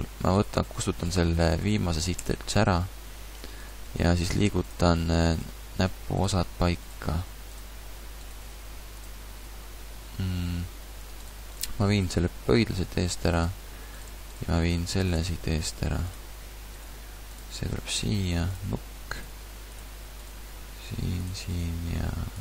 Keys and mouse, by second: 2.2 x, 3.9 g, 5.5 g, 7.0 g, 8.4 g, 12.4 g, 15.4 g, 16.9 g, 18.1 g, 19.3 g, 20.3 g, 21.6 g.